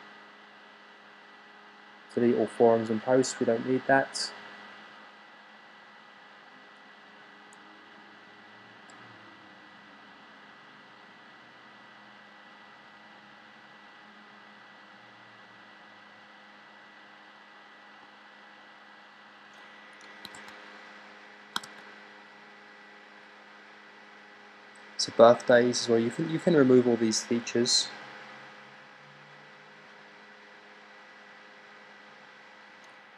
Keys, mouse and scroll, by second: 20.2 super+r, 21.5 super+r.